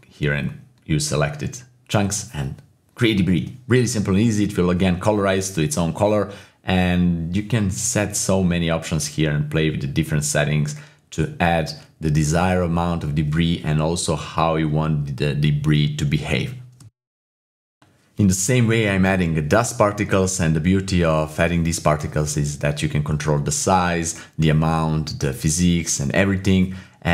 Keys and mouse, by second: 0.3 click, 1.1 click, 2.9 typing, 3.6 middle click, 4.8 middle click, 6.9 shift+space, 8.8 space, 9.1 middle click, 9.5-10.7 drag, 11.7 shift+space, 13.3 shift+space, 13.7 click, 13.9 KP_0, 14.5 shift+space, 14.9 click, 17.4 middle click, 17.8 click, 18.0 click, 18.5-18.9 typing, 18.6 click, 20.2 click, 20.2 space, 20.7 click, 21.2 click, 21.4 click, 22.0 click, 22.4 ctrl+z, 23.4 click, 23.5 shift+space.